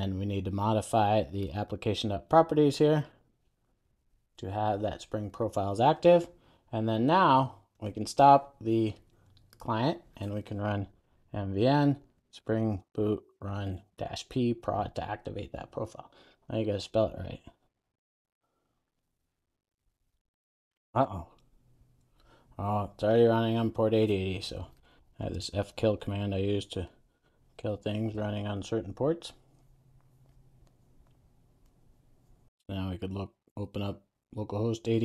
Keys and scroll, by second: 4.1 super+v, 4.5 super+s.